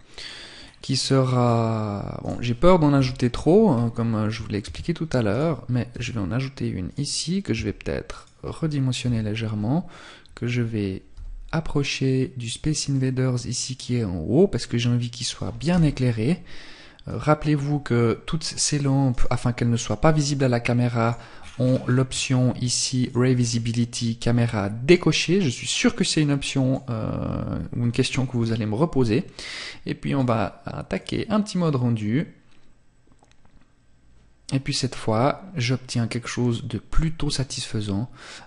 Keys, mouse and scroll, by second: 0.6-1.4 scroll down 1, 1.4 right click, 1.4-2.1 scroll down 1, 2.1 KP_7, 2.9-3.4 scroll down 1, 3.4 scroll down 1, 3.8 shift+d, 4.5 click, 5.1 r, 6.1 click, 6.7 s, 7.5 click, 8.2 KP_3, 11.8 click, 12.1 middle click, 14.9 KP_0, 15.8 scroll up 1, 16.4-16.9 scroll down 1, 17.6 right click, 18.5 right click, 20.2 click, 20.6-21.0 scroll down 5, 20.9 scroll up 1, 21.0 scroll down 1, 22.3 click, 22.3-23.4 scroll down 5, 23.4 scroll down 1, 24.1 click, 28.4 scroll up 1, 29.4 click, 33.9 scroll up 1.